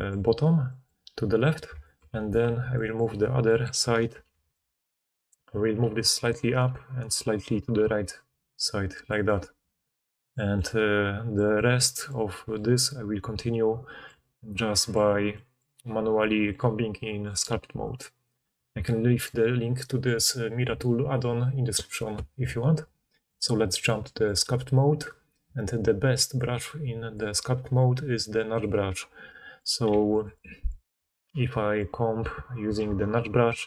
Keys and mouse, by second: 0.0-3.2 drag, 2.1 middle click, 2.1 right click, 2.4 4, 4.1 ctrl+d, 9.4-14.1 drag, 14.1 Tab, 18.0-27.4 drag, 28.9 click, 29.9 f, 30.3-31.4 middle drag, 32.6-33.6 ctrl+drag, 32.8 ctrl+z.